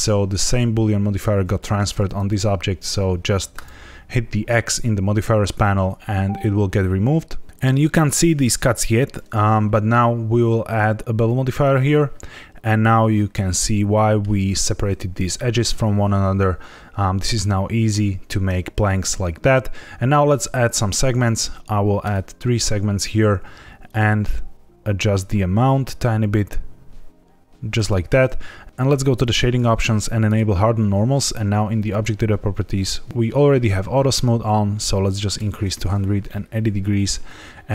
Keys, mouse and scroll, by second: 3.5 click, 10.6 click, 13.1 middle click, 20.9 click, 22.0 click, 23.8 shift+click, 28.6 click, 29.2 click, 30.2 click, 31.7 click, 34.4 click, 36.2 middle click.